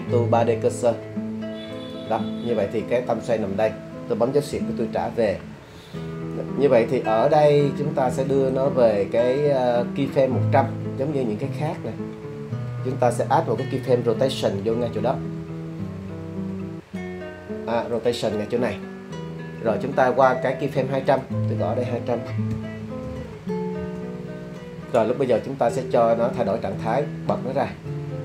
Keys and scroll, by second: 4.5 /, 15.1 i, 22.5 2, 23.0 0, 23.2 0, 23.8 Return.